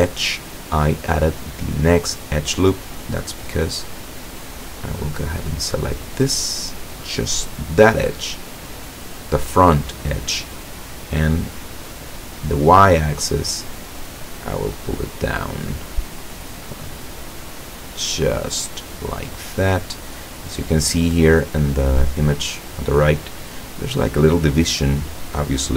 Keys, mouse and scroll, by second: 4.0 right click, 4.7 middle click, 6.0-6.5 scroll down 1, 6.8 middle click, 12.1 middle click, 13.5-15.0 drag, 15.2-16.4 middle drag, 16.8-18.1 middle drag, 18.1 scroll up 1, 19.5 middle click.